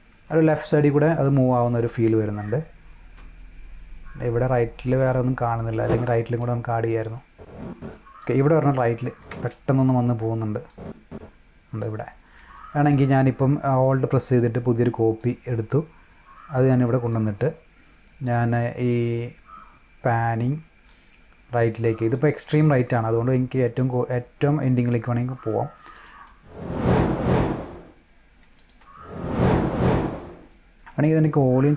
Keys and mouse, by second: 1.0 -, 2.0-8.1 drag, 10.6 click, 12.7 click, 14.3-15.1 drag, 15.6-17.0 drag, 20.8-22.0 drag, 24.1 click, 25.9 click, 26.2 space, 28.3 space, 28.5 click.